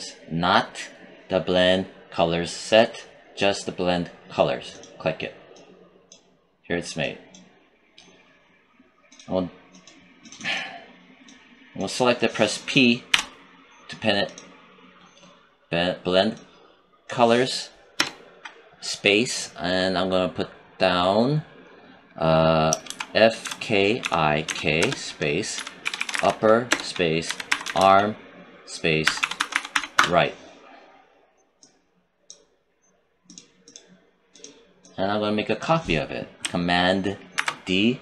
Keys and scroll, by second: 13.0 p, 17.8 space, 22.7-27.7 typing, 28.9-29.6 typing, 29.8 Return, 37.2 ctrl+d.